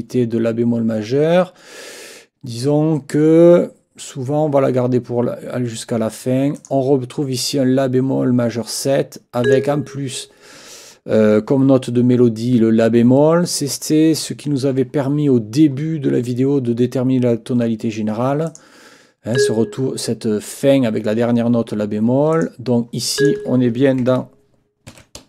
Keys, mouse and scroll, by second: 6.6 click, 9.4 click, 18.5 click, 19.3 click, 22.3 click, 23.2 click, 24.9 ctrl+t.